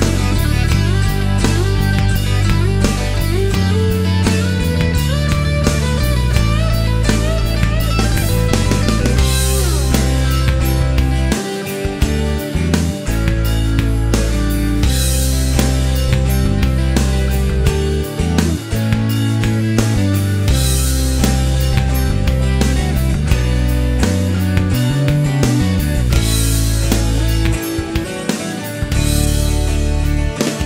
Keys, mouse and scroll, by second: 1.8 click, 2.9 click, 5.3 click, 6.9 click, 8.9 ctrl+click, 10.1 click, 11.5 click, 12.9 click, 17.2 click, 19.5-20.5 middle drag, 20.6 shift+right click, 26.6 click, 27.9 ctrl+click, 30.1 click.